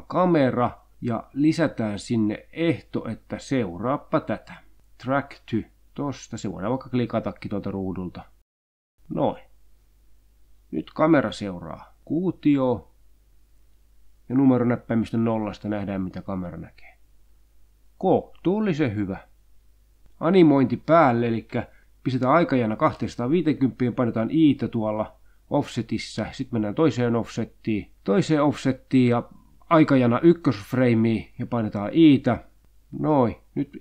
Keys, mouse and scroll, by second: 0.1 click, 2.1 click, 3.7 click, 5.2 click, 6.5-7.0 scroll down 2, 7.4 click, 8.8 click, 10.8 click, 11.3-13.8 drag, 14.0 0, 14.7-19.4 drag, 20.7-22.9 drag, 24.1 i, 25.4-26.4 drag, 27.1-31.3 drag, 32.3 i, 33.4 i.